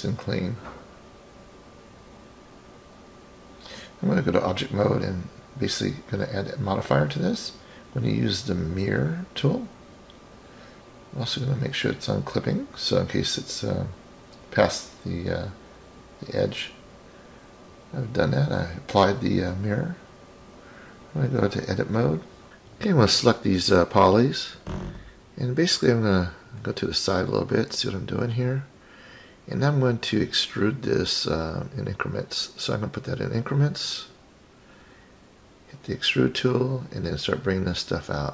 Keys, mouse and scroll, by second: 0.0 shift+click, 1.6 Delete, 2.5 click, 4.2 shift+click, 6.6 click, 9.7 click, 11.0-14.1 drag, 16.8 click, 18.8-19.8 drag, 21.3 click, 22.4 click, 22.5 scroll down 5, 22.6 click, 23.1-23.6 drag, 23.9-25.2 scroll down 6, 24.4-25.2 middle drag, 27.4 KP_1, 28.5 KP_3, 31.1 click, 31.9-33.1 drag, 35.2 click, 36.5-38.3 drag.